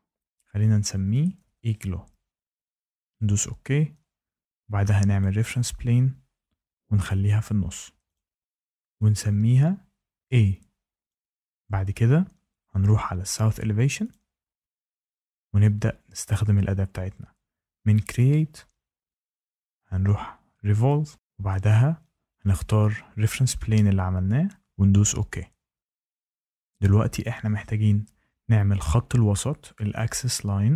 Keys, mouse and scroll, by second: 0.4-2.0 typing, 3.1 click, 5.1 click, 7.0 click, 8.1 click, 8.9 click, 10.1 a, 11.0 click, 13.8 click, 14.0 click, 18.1 click, 20.8 click, 22.4 click, 23.2 click, 25.2 click.